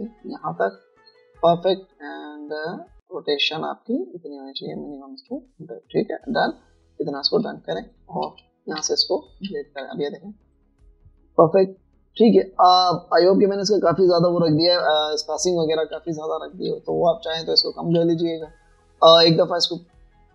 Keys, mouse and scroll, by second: 8.3 alt+scroll down 1, 8.5-9.5 typing, 9.9 Delete, 10.9 b, 17.1 v, 17.9 alt+scroll down 1, 18.4 alt+scroll down 1, 19.5 alt+scroll up 1.